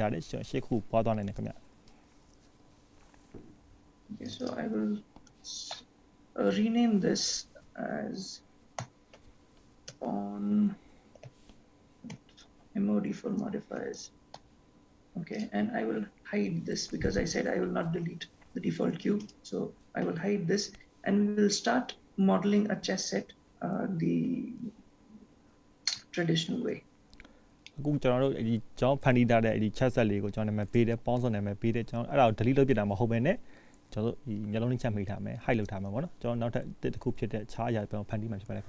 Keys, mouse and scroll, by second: 4.4 click, 4.5 click, 15.6 click, 19.3 click, 25.8-26.3 scroll up 2, 26.5 shift+middle click, 27.4-28.0 scroll up 5, 28.0 shift+middle click, 28.6-29.2 scroll up 1, 29.2 middle click, 33.1 shift+middle click.